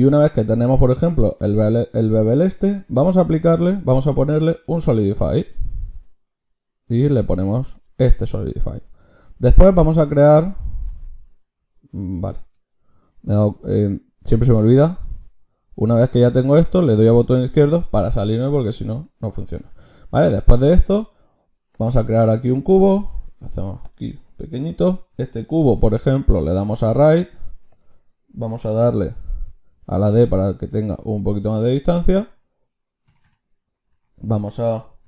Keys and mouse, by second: 2.9 ctrl+shift+q, 9.7-10.9 middle drag, 10.9 ctrl+z, 12.9 ctrl+shift+q, 19.7-21.6 drag, 19.7 shift+a, 22.6 s, 25.6 ctrl+shift+q, 32.2-35.0 drag.